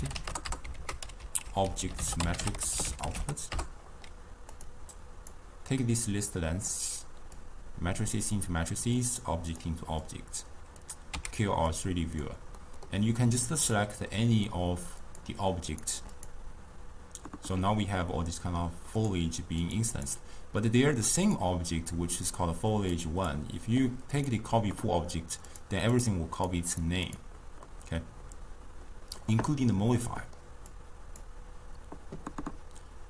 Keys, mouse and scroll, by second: 0.7 ctrl+a, 0.8 ctrl+a, 7.1 click, 8.9-10.0 drag, 10.1-11.5 drag, 11.5 x, 16.3-17.6 drag, 17.6-19.1 middle drag, 19.1 click, 19.7-26.8 click, 27.7-32.5 middle drag, 32.5 click.